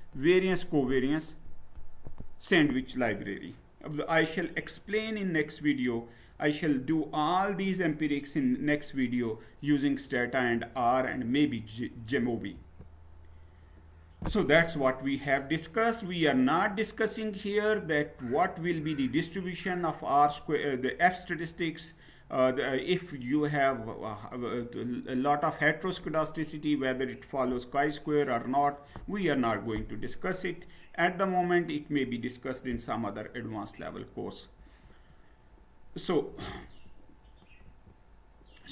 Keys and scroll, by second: 12.5 Down, 34.6 Down, 36.6 Up, 37.7 Down.